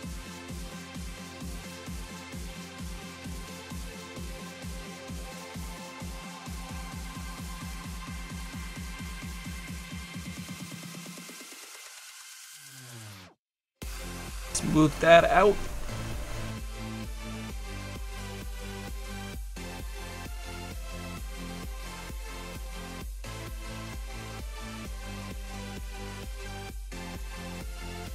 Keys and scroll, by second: 23.0 s, 23.8 s, 25.2 s, 25.8 s, 26.3 s.